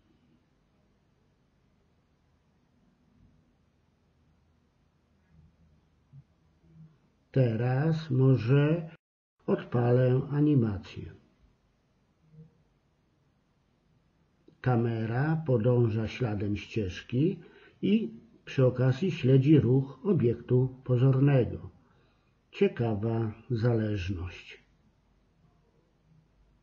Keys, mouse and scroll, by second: 0.4 KP_3, 1.7 g, 6.9-8.6 middle drag, 8.6-10.5 drag, 10.8-12.6 drag, 12.6 right click, 13.1 g, 18.0 KP_3, 21.6-25.5 middle drag, 25.5-26.5 right drag, 26.5 click.